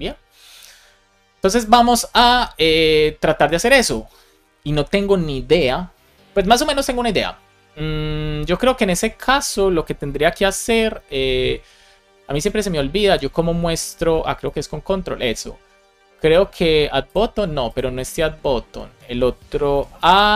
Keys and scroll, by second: 14.3 ctrl+Tab, 19.6 super+p, 20.0-20.3 typing.